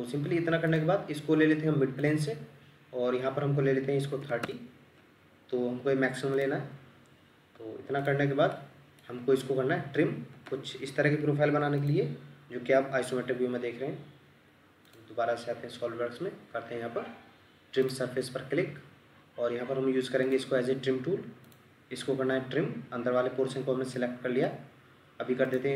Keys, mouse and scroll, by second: 4.0 typing, 4.4 Return, 8.5 middle click, 9.2-9.6 scroll down 1, 10.7 scroll up 1, 23.4 scroll down 1, 23.9 middle click.